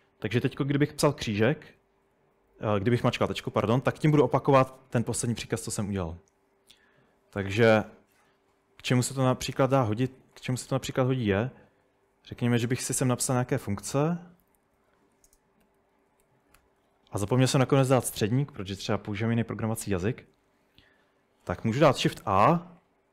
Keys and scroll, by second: 1.1-2.3 typing, 4.7 typing, 8.2 typing, 10.9-17.4 typing, 15.4 Return, 22.3 shift+a.